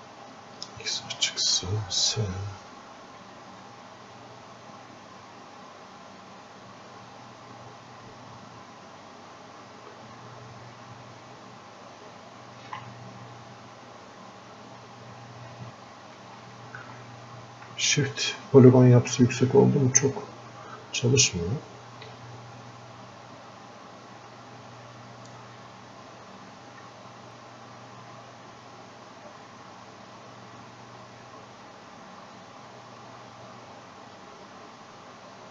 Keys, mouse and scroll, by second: 2.3 s, 3.0 s, 3.7 click, 4.6 click, 5.4 click, 7.1-10.3 ctrl+drag, 10.3-12.0 ctrl+drag, 13.5 click, 14.6 click, 15.7 shift+click, 18.1 shift+d, 18.3 shift+click, 20.0-21.1 drag, 21.1 click, 22.2 shift+click, 23.1-35.5 drag.